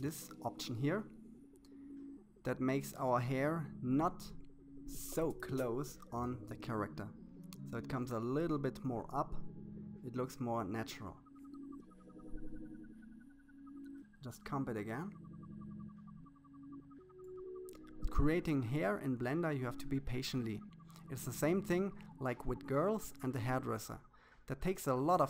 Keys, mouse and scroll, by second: 2.8-4.3 drag, 9.1-10.6 shift+middle drag, 11.2-12.8 drag, 13.9-15.5 scroll down 2, 15.5-17.1 drag, 18.1-19.6 drag, 20.3-21.9 shift+middle drag, 21.9-23.2 drag, 24.2-25.2 drag.